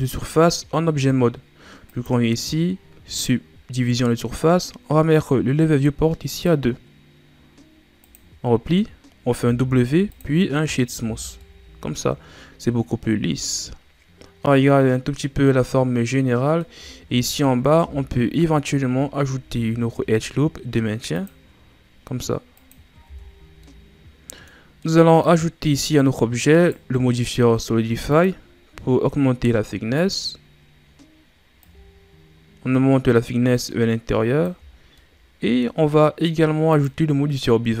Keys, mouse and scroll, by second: 3.2-4.9 drag, 6.3-9.4 drag, 9.4 w, 11.0 a, 11.4-14.4 middle drag, 17.0-17.3 scroll down 1, 17.3 middle drag, 17.5 scroll up 2, 17.7 Tab, 19.4 ctrl+r, 23.1 Tab, 23.6-25.5 middle drag, 25.5-26.5 scroll up 1, 26.5 right click, 30.1-31.1 drag, 31.6-34.6 drag, 34.7 scroll down 2, 35.0-36.6 middle drag, 36.6-37.8 drag.